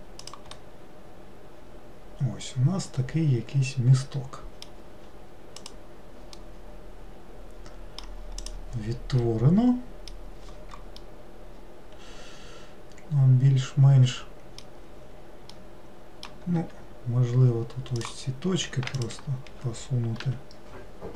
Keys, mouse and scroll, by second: 0.6-3.6 middle drag, 5.7 click, 6.5-8.5 middle drag, 8.5 click, 9.4-14.2 middle drag, 15.6-16.7 middle drag, 16.7 1, 18.1 click, 19.0 shift+click.